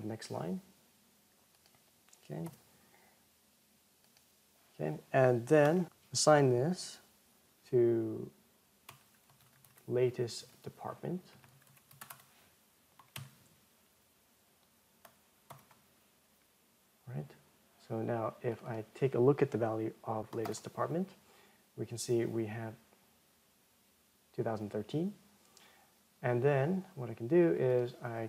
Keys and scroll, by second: 12.3 alt+-, 15.2 ctrl+Return, 21.1 ctrl+Return.